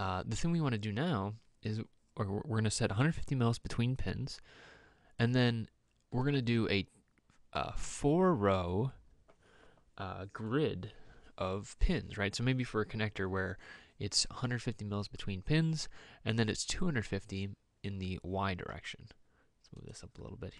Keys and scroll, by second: 18.9 m.